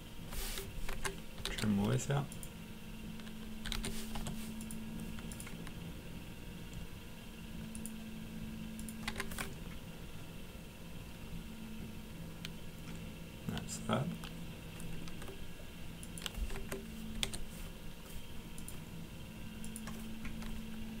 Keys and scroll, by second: 0.9 Escape, 1.1-2.0 typing, 3.7 typing, 4.1 Return, 9.1 Escape, 16.5 Escape, 16.9-17.7 typing.